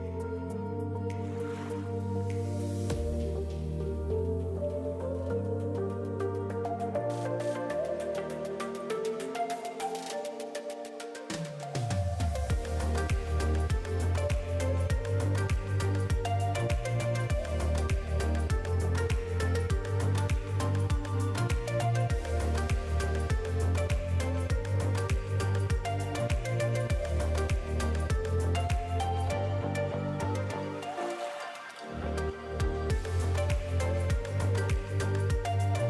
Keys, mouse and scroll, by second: 0.4 click, 0.6-1.3 scroll up 2, 1.3 click, 3.1 click, 4.6 shift+middle click, 5.0 click, 7.8 alt+a, 7.9 Tab, 8.0-8.3 scroll down 5, 8.3 alt+a, 8.5 shift+middle click, 8.8 middle click, 9.9 click, 10.8 middle click, 11.2-11.6 scroll up 1, 12.4 shift+click, 15.9 click, 18.4 click, 27.0 click, 30.4 click, 32.8 shift+click.